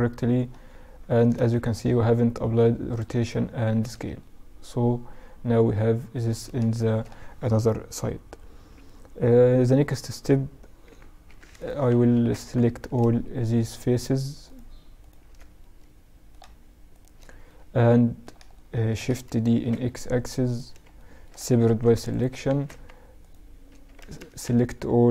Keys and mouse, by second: 0.4 ctrl+a, 2.1-3.3 drag, 2.9 z, 3.3-4.1 middle drag, 6.3-9.0 middle drag, 9.0-14.8 right drag, 10.0 h, 11.5 Tab, 14.8-19.5 middle drag, 18.7 shift+d, 20.1-21.8 middle drag, 20.9 p, 21.8 Tab, 22.3 right click, 22.8 Tab, 23.1 a, 23.3 a, 23.5 a, 24.3 s.